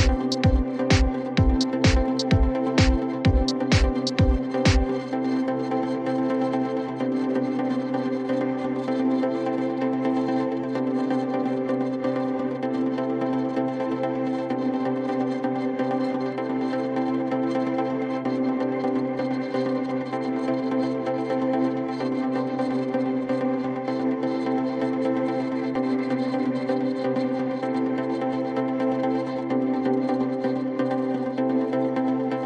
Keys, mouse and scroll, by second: 0.5 click, 0.7-1.5 typing, 2.9-3.7 typing, 3.6 right click, 5.3 click, 6.2-7.1 typing, 7.9 click, 8.5-10.8 drag, 12.9 click, 13.3-14.9 typing, 15.9 click, 16.1 click, 17.9 click, 20.3 click, 21.3 click, 27.2 click, 27.8-28.7 typing.